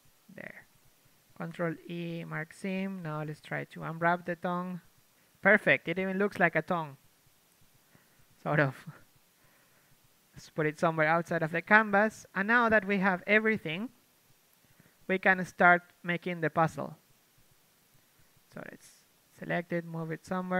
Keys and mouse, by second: 0.4 c, 0.9-2.5 drag, 2.5 ctrl+e, 2.7 click, 3.5 ctrl+Tab, 3.8-4.8 typing, 6.5 a, 6.9 s, 7.3 click, 7.6 Tab, 8.7 Tab, 9.1 s, 9.4 g, 9.9 r, 11.3 a, 11.5 a, 12.6 alt+h, 12.8 a, 13.7 a, 13.7 KP_3, 14.2 KP_5, 15.4-20.3 typing, 18.8 click.